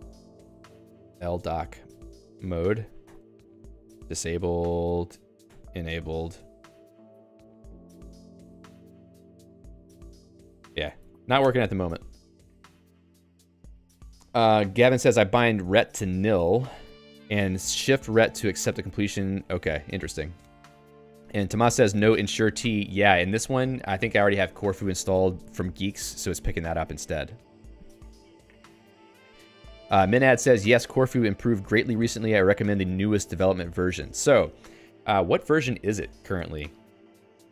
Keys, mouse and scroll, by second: 0.3 ctrl+g, 0.9-2.1 typing, 2.7 Down, 3.1 Return, 4.3 alt+x, 5.5 Return, 8.1 r, 9.7 Down, 9.9 Down, 10.0 Down, 10.2 Down, 10.3 Down, 10.5 Down, 10.8 Down, 11.0 ctrl+g.